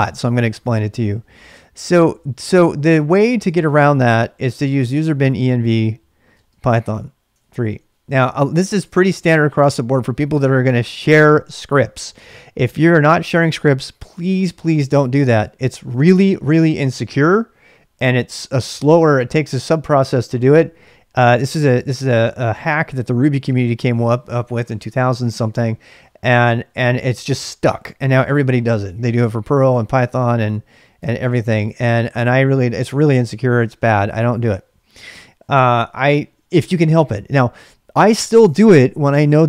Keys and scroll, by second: 0.3-6.3 typing, 7.3 ctrl+[, 29.9-31.6 typing, 31.0 ctrl+[, 35.8 ctrl+[, 35.9 k.